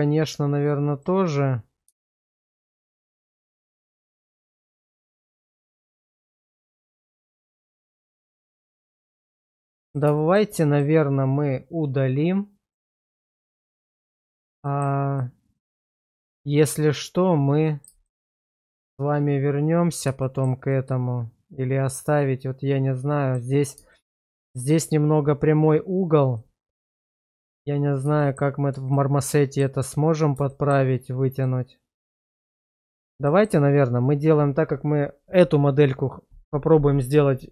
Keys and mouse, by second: 0.9 click, 2.0 shift+middle click, 2.5-6.7 middle drag, 6.9 shift+middle drag, 7.5-8.2 middle drag, 8.4 shift+middle drag, 8.9-9.9 middle drag, 10.2 shift+middle drag, 10.6 middle click, 12.7 click, 13.6 shift+middle drag, 14.6 shift+middle drag, 15.2-17.8 middle drag, 18.1 shift+middle drag, 20.2 shift+middle drag, 20.7-23.3 middle drag, 23.9 shift+middle drag, 24.3 middle drag, 26.3-26.9 middle drag, 27.1 shift+middle drag, 28.2 shift+middle drag, 28.9-29.6 middle drag, 30.5 shift+middle drag, 31.4-32.7 middle drag, 33.3 shift+middle click.